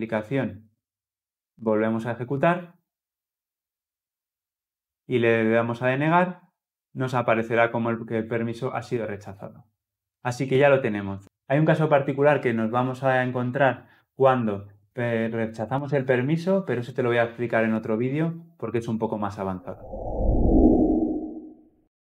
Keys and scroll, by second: 1.9 shift+F10.